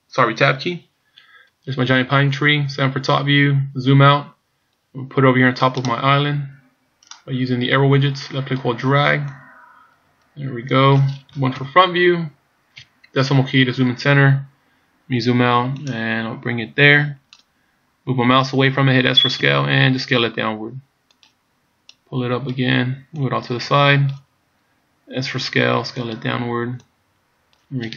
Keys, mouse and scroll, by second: 2.6 KP_7, 3.7-5.5 scroll down 6, 5.8 click, 8.0 click, 9.3 click, 11.6 KP_1, 12.8 KP_Decimal, 14.6 scroll down 3, 15.8 click, 19.5 s, 21.9 click, 23.2 click, 25.2 s, 26.8 click.